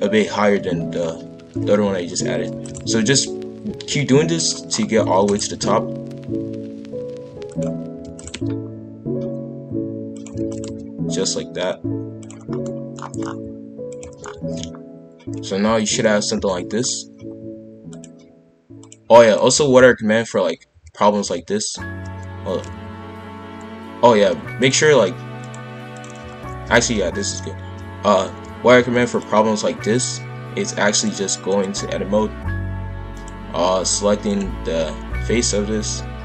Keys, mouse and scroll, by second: 2.8 g, 4.7-5.1 scroll down 3, 5.1 shift+d, 5.4 g, 8.0 shift+d, 8.3 g, 10.3 shift+d, 10.6 g, 12.5-13.4 scroll down 6, 12.6 middle click, 13.4 z, 14.3 scroll down 1, 14.4 shift+f, 17.9 click, 18.8 click, 19.6 shift+f, 25.4 click, 26.3 shift+f, 30.9-34.3 drag, 35.4 click.